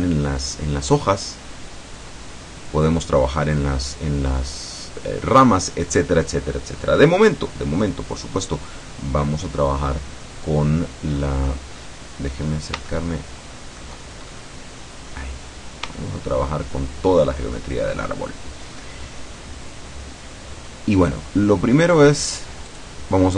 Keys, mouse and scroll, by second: 8.7-9.5 scroll up 2, 11.2-11.5 scroll up 1, 11.8 scroll down 1, 12.4-12.8 scroll up 1, 13.0-14.0 shift+middle drag, 14.3-15.2 shift+scroll up 1, 16.0-17.4 shift+middle drag, 22.7 click.